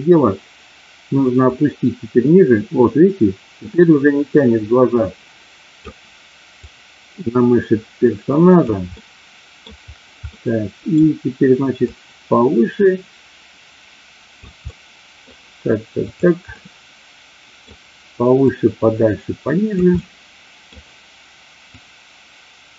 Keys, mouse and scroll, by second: 1.3-5.8 drag, 6.6-8.7 drag, 8.9 middle click, 10.2 middle click, 11.9-14.4 drag, 14.6 middle click, 16.5-17.7 middle drag, 18.5-19.7 drag, 19.8 middle click, 21.7-22.7 drag.